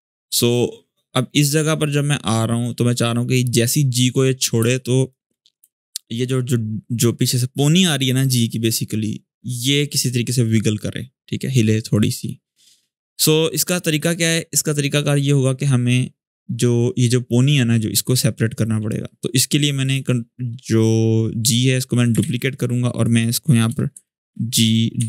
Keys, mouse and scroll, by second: 3.5-4.3 scroll up 1, 4.5-5.1 click, 4.8 space, 5.2 scroll up 1, 5.3 space, 5.5 click, 5.9 space, 11.7-12.6 drag, 19.5 click, 21.9 ctrl+d, 22.7 click, 23.4 Return, 23.7 Right, 24.6-25.0 typing.